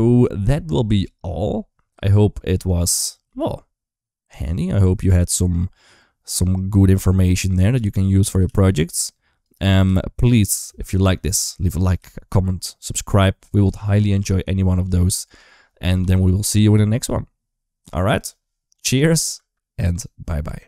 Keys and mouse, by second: 1.8 space, 2.6 click, 3.2 g, 7.7 s, 8.4 g, 9.6 g, 11.0 middle click, 11.7 g, 14.3 KP_1, 14.7 KP_3, 15.0 KP_1, 16.0 g, 19.2 space.